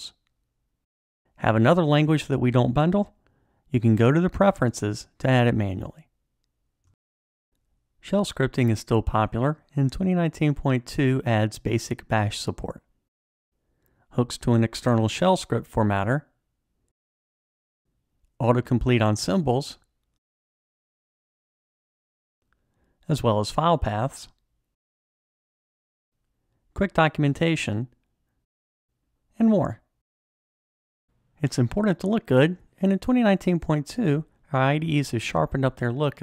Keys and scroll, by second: 14.6 alt+super+l, 18.7 Tab, 21.4 Return, 24.3 Tab, 27.7 F1, 35.5 shift+F9.